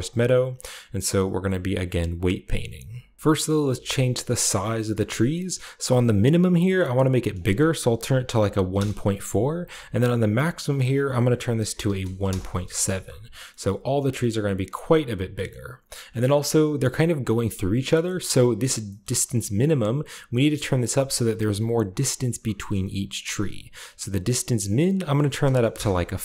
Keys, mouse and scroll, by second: 0.9-2.0 drag, 2.2 click, 2.9 scroll down 1, 3.2-3.9 scroll up 1, 4.6 middle click, 4.8-7.3 scroll up 1, 5.0-7.3 middle drag, 7.3 click, 8.1-8.7 typing, 8.7 Return, 10.5 click, 11.6-12.2 typing, 12.0 click, 13.6-14.1 middle drag, 13.6-14.6 scroll down 1, 14.6 middle click, 14.6 scroll down 1, 14.7-15.2 scroll up 1, 15.4-15.9 scroll up 1, 15.9-17.7 scroll down 2, 18.0 middle click, 18.3 middle click, 18.3 typing, 19.0-20.7 scroll up 1, 24.6 click, 25.6 typing.